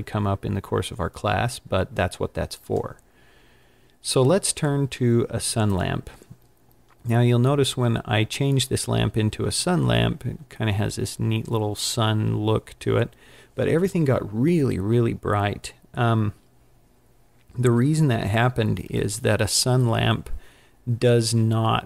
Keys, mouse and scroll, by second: 2.7 click, 5.7 click, 9.8-10.4 scroll up 5, 11.3 scroll down 3.